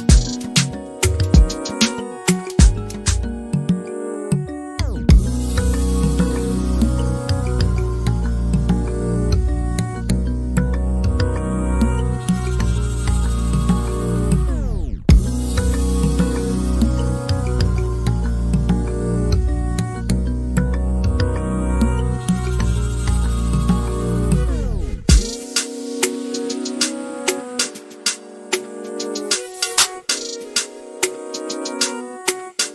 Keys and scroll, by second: 5.1 m, 25.6 m, 30.7 Delete.